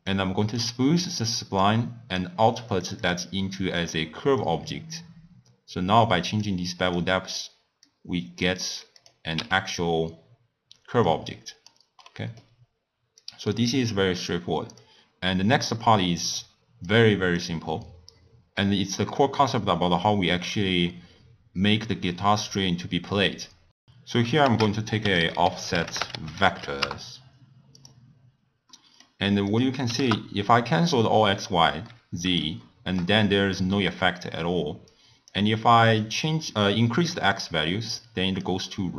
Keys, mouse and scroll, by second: 0.1 click, 1.3-3.3 drag, 3.8 click, 4.4-7.0 drag, 7.8 click, 9.0 click, 9.6 x, 11.0-12.0 drag, 12.0-13.2 middle drag, 13.2 click, 14.8-16.0 drag, 16.0-16.8 middle drag, 16.8-19.8 drag, 24.4 ctrl+a, 25.3 f, 28.7 middle click, 29.5-31.8 drag, 31.8-34.8 middle drag, 34.8-38.9 drag.